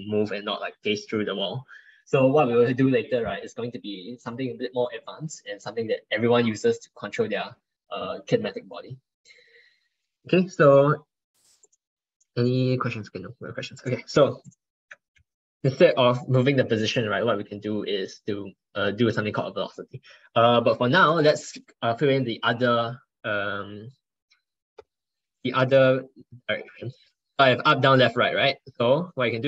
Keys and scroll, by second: 28.2 ctrl+shift+Left.